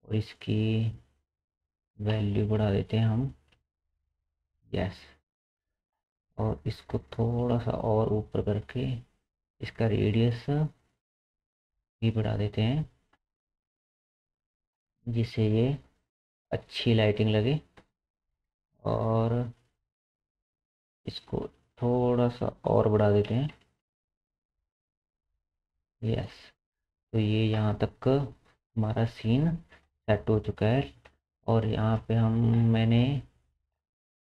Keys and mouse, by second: 0.3 click, 0.8-8.2 drag, 2.4 KP_0, 7.0 g, 8.2 middle click, 9.0-14.5 drag, 20.9-31.7 drag, 31.7-33.7 middle drag, 33.7 click.